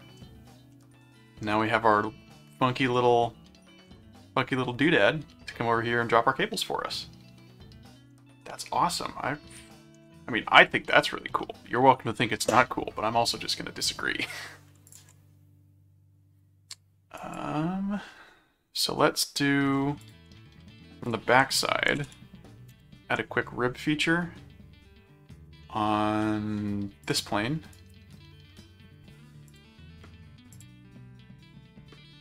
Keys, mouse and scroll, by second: 0.7-2.6 middle drag, 5.4-10.2 middle drag, 14.9 ctrl+click, 15.1 ctrl+r, 17.2 click, 19.0 middle click, 20.0 ctrl+click, 20.5 ctrl+2, 21.0 click, 21.1-22.5 typing, 22.7 Return, 27.0 click, 27.7 right click, 29.5 click, 30.5 click.